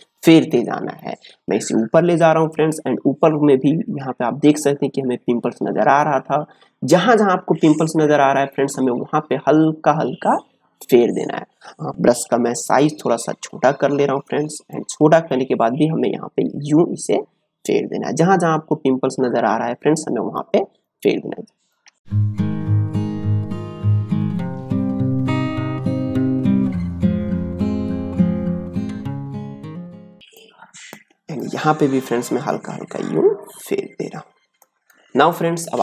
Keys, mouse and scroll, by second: 0.8 space, 1.0 click, 1.3 space, 2.2-12.2 drag, 12.4 ctrl+space, 12.7 ctrl+click, 12.9 ctrl+space, 13.8-15.3 alt+right drag, 15.3 click, 22.0 ctrl+space, 22.1 ctrl+click, 22.3 ctrl+space, 22.8-25.7 ctrl+drag, 25.7 space, 26.1 click, 26.6 space, 26.7 click, 27.1 space, 27.3 click, 27.4 space, 27.6-30.2 drag, 30.2 ctrl+space, 30.3 ctrl+click, 30.8 ctrl+space, 31.4-34.7 drag, 34.7 ctrl+space, 35.0 ctrl+click, 35.6 ctrl+space.